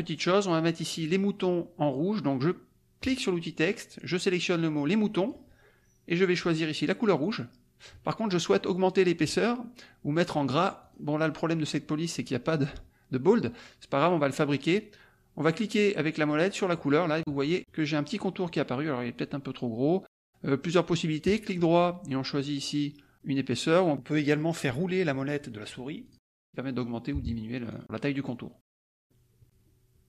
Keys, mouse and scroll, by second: 3.0 click, 4.7 click, 7.2 click, 10.8 click, 16.7 middle click, 21.2 right click, 26.3 scroll up 1, 27.6-28.0 scroll down 1, 28.0 scroll up 1, 28.6-29.0 scroll down 1, 29.0 scroll up 1, 29.4 click.